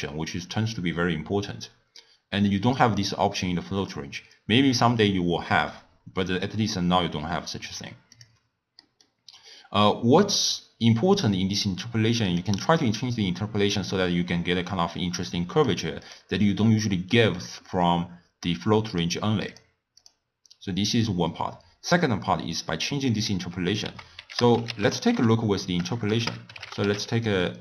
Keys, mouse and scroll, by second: 0.0 click, 7.7 click, 8.8 middle click, 9.2-9.8 scroll up 1, 9.8-10.4 scroll down 1, 10.4-11.1 scroll down 1, 11.1-14.2 drag, 14.9-23.0 drag, 23.9 ctrl+a.